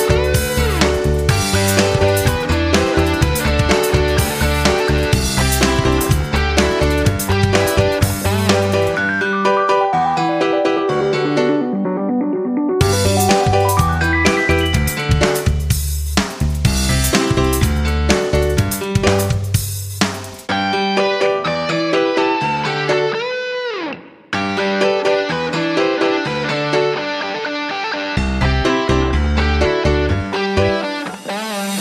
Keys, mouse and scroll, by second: 0.1 F9, 1.7 click, 4.9 shift+click, 5.8 click, 9.6 shift+click, 10.3 click, 14.9-21.7 shift+drag, 26.1 Right, 26.3 Right, 26.5 Right, 27.0 click, 29.5 Left, 30.2-31.8 drag.